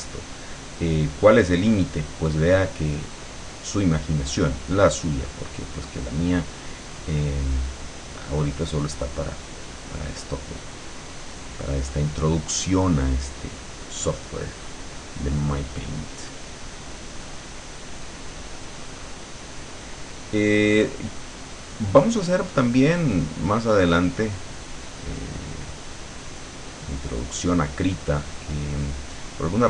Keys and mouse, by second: 7.6-11.7 drag, 12.4-18.6 drag, 19.3-20.9 drag, 24.4-27.8 drag, 29.1 click.